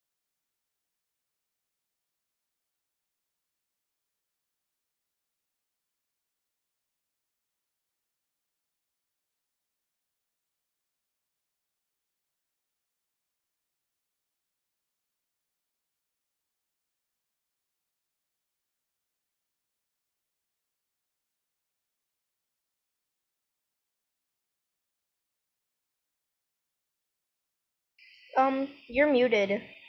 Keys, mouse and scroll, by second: 18.3-29.8 drag.